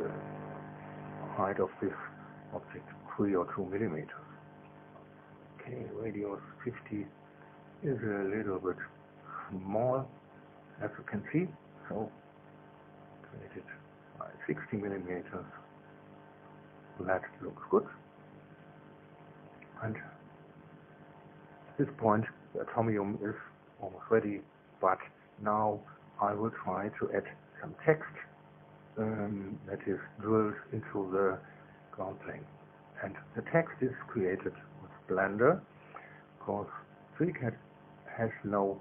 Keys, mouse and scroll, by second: 3.3 click, 5.2 KP_5, 5.4 KP_0, 9.1-12.8 drag, 12.8-14.1 middle drag, 14.1 click, 14.5-17.6 middle drag, 16.1 KP_6, 16.3 KP_0, 16.9 KP_Enter, 18.3-22.7 drag, 19.2 KP_2.